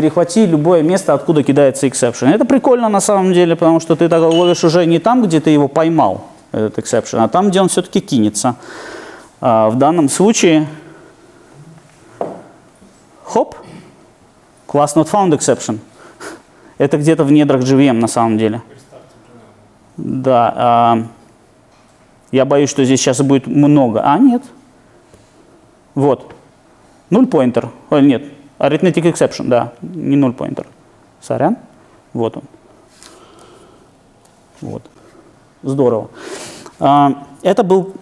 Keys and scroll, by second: 11.8 ctrl+d, 22.9 alt+super+r.